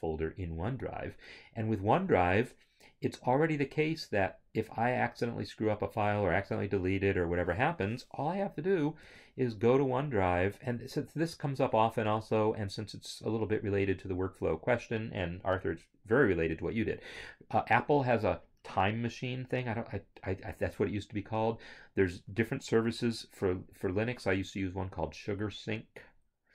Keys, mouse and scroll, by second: 9.1 alt+Tab, 10.8 Tab.